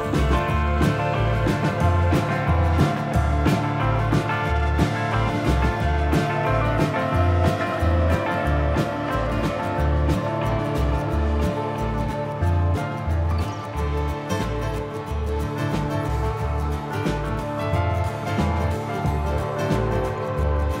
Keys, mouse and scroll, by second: 0.1-4.5 ctrl+KP_Add, 5.2-5.7 scroll up 3, 6.3 ctrl+KP_Add, 7.1 middle click, 7.7 shift+middle click, 8.6 z, 10.0 shift+click, 10.4 middle click, 11.7 shift+click, 12.5 x, 13.7 scroll down 3, 13.9 middle click, 15.7 shift+middle click, 16.1 scroll down 1, 16.3 middle click, 18.9 Tab.